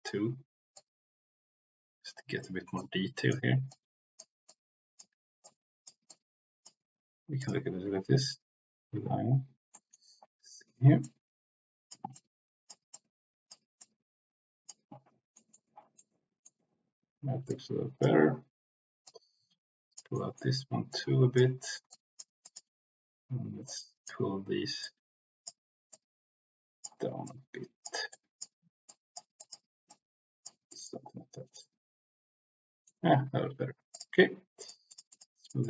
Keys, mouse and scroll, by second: 0.7 middle click, 0.8-2.4 drag, 2.7 middle click, 2.7 click, 3.6 middle click, 3.7 click, 4.4 click, 5.4 click, 6.0 click, 9.7 middle click, 11.1 click, 12.1 click, 12.9 click, 13.7 click, 15.3 middle click, 16.0 middle click, 17.4 click, 19.0 click, 20.1 middle click, 20.8 click, 21.8 click, 22.4 click, 23.6 click, 24.7 click, 25.9 click, 27.2 click, 28.1 click, 28.9 click, 29.3 click, 29.8 click, 30.7 click, 31.5-32.9 middle drag, 33.9 click, 34.6 click, 34.9 click, 35.1 click, 35.4 click.